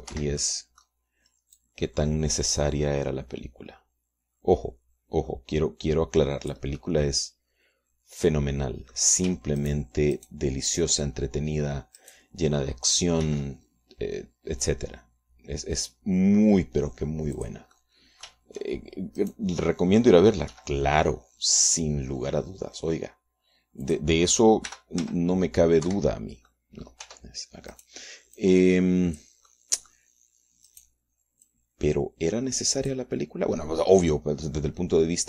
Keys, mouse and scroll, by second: 0.8 shift+d, 1.2 shift+Escape, 1.5 shift+click, 2.7-7.8 drag, 8.6-10.2 drag, 10.2 shift+middle click, 10.7 shift+right click, 11.0 shift+middle click, 11.2 shift+right click, 11.6 shift+middle click, 11.8 shift+right click, 13.1 shift+right click, 14.4 shift+d, 18.5 click, 18.8 middle click, 18.8 click, 19.6 shift+middle click, 20.3 right click, 21.6 g, 25.0 click, 25.8 r, 26.1 z, 27.0 Escape, 27.6 click, 28.2 Tab, 28.8 click, 29.5-30.5 drag, 30.6 click, 31.8 click, 32.6-34.2 drag.